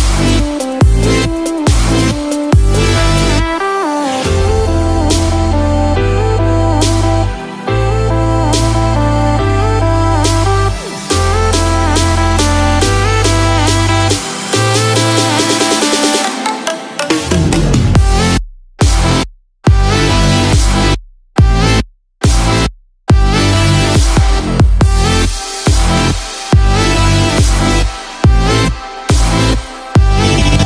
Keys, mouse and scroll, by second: 0.6 middle click, 0.6 scroll down 3, 1.7 shift+middle click, 3.1-3.4 scroll up 1, 4.5 click, 6.6 click, 8.1-8.9 scroll down 2, 8.5 middle click, 9.5-10.3 scroll up 1, 10.3 click, 10.8 scroll down 1, 12.3-12.8 scroll up 2, 12.8 shift+middle click, 13.1 middle click, 13.6 scroll up 1, 13.8 middle click, 15.4 click, 16.3 middle click, 17.3 click, 17.8 Tab, 18.2 scroll down 1, 18.6 middle click, 19.7 KP_7, 20.5-21.0 scroll up 6, 21.5 shift+middle click, 21.9 shift+scroll up 1, 22.0-22.9 scroll down 4, 22.9 shift+middle click, 24.8 scroll up 1, 28.1 click, 29.9 click.